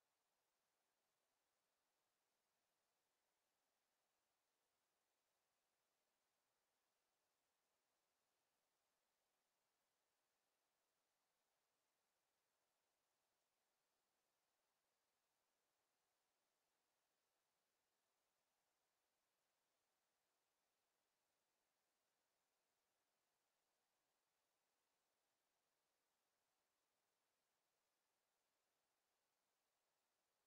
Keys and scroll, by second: 25.3 Escape.